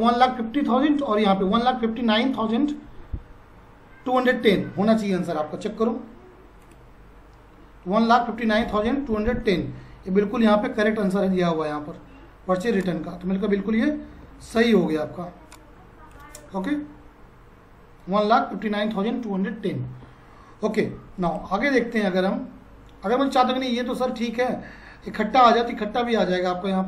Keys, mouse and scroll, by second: 6.6 click, 10.5 F5, 21.3 click.